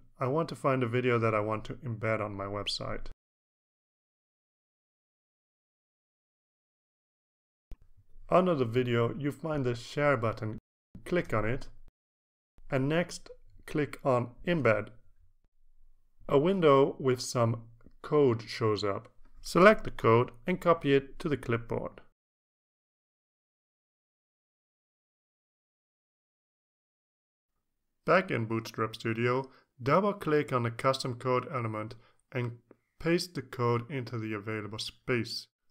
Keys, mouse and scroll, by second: 0.0 click, 0.7 click, 5.3 click, 5.8 click, 7.8 click, 12.0 click, 16.1 click, 18.5-23.4 drag, 23.8 right click, 24.6 click, 25.4-26.1 drag, 27.0 click, 33.7 ctrl+a, 34.1 ctrl+v, 35.1 ctrl+s.